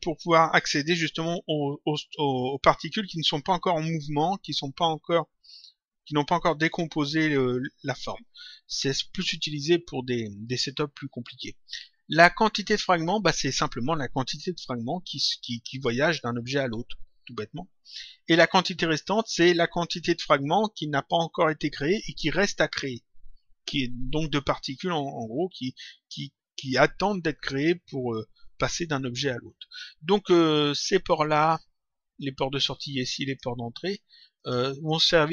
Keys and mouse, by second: 31.1 click, 34.3 click.